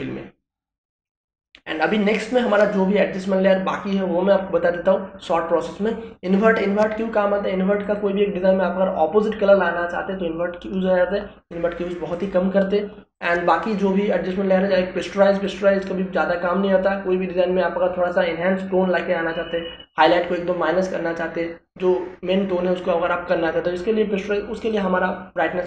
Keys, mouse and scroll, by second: 8.8 click, 13.1 click, 16.3 click.